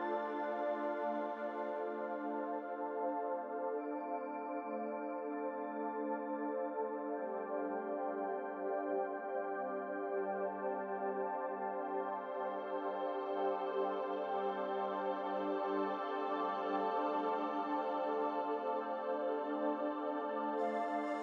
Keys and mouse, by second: 14.8-21.2 drag.